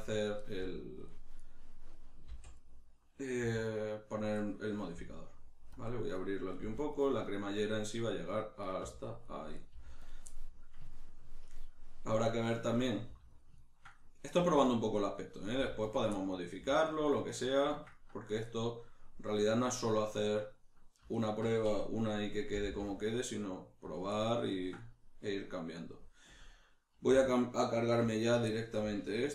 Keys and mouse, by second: 0.1 click, 0.3 right click, 0.5 g, 1.1 click, 1.4 right click, 2.3 v, 2.6 right click, 3.4 g, 4.2 click, 4.4-5.8 middle drag, 5.0 g, 5.8 click, 5.8-7.0 middle drag, 6.6 g, 7.0 click, 7.2-8.6 middle drag, 8.6 right click, 8.8 g, 9.2 click, 9.6 right click, 9.7 g, 10.1 click, 10.3-13.4 middle drag, 13.1 g, 13.4 click, 13.6-15.4 ctrl+middle drag, 14.4 g, 14.8 click, 15.4 right click, 15.6 g, 16.0 click, 16.1 middle click, 16.6 g, 17.0 click, 17.0-21.1 middle drag, 21.1 alt+right click, 22.6 g, 24.0 click, 24.1-28.1 middle drag, 27.1 2, 28.1 alt+right click, 28.5 shift+middle click, 29.1 alt+shift+right click.